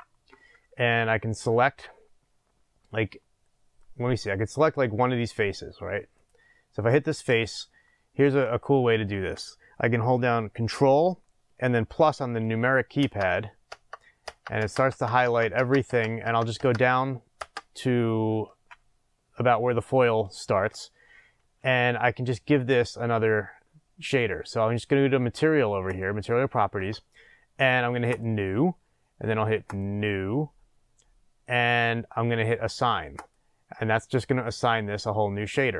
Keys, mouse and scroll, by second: 4.3-6.1 scroll up 2, 6.1 click, 7.4-25.9 shift+middle drag, 8.5-12.3 scroll down 2, 12.3-12.9 scroll down 1, 12.9 ctrl+KP_Add, 25.9 click, 28.2-35.7 drag.